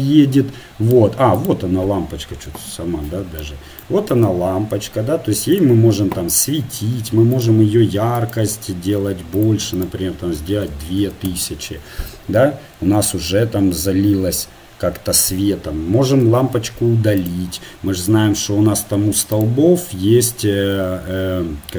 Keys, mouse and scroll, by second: 1.5-4.2 drag, 2.8 KP_1, 4.2 g, 6.5-10.7 drag, 10.7 KP_0, 16.3 Delete, 18.3-20.3 middle drag, 20.3-21.4 right drag.